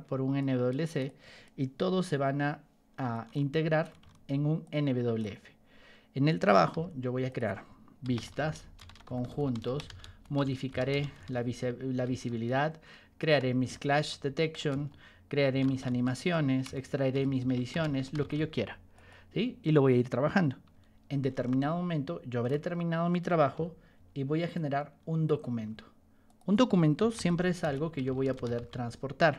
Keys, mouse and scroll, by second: 0.3 ctrl+click, 2.0 p, 3.3 ctrl+shift+click, 4.6 ctrl+shift+click, 6.6 t, 7.2 click, 7.8-18.8 typing, 14.6 Return, 18.9 click, 20.7 y, 21.5 ctrl+shift+click, 23.5 g, 24.5 ctrl+click, 25.5 t, 26.2 click, 26.7-29.3 typing.